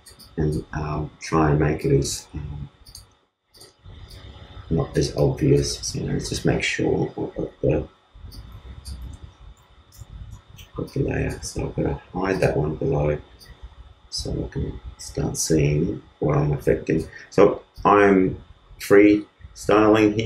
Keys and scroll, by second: 8.9 super+z, 9.9 super+d, 11.4 super+z.